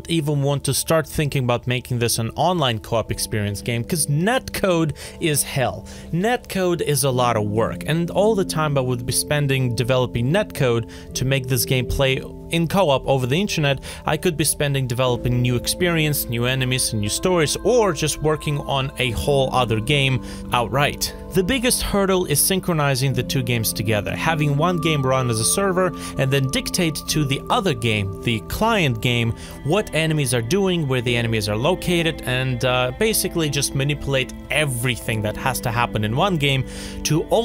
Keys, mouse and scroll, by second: 16.1 alt+click.